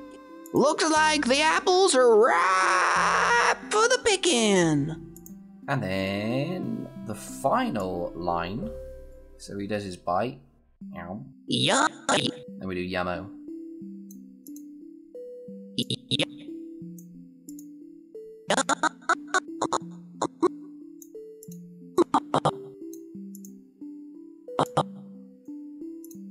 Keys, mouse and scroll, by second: 4.9 click, 5.4 s, 5.9 scroll down 1, 7.6-9.1 click, 21.7 scroll down 1, 21.8-22.7 click.